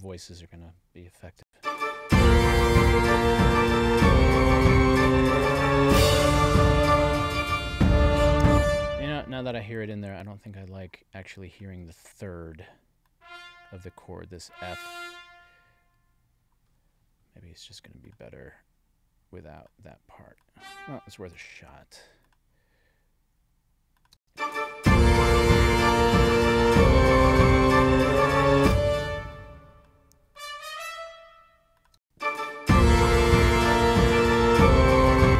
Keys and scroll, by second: 1.4 space, 8.3 space, 24.1 space, 28.5 space, 31.9 space, 35.2 space.